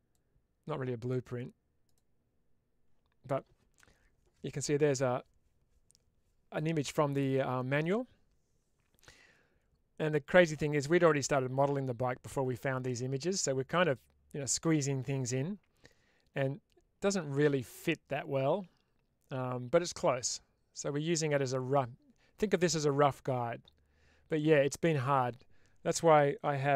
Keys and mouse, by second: 0.1 click, 2.2-16.1 drag.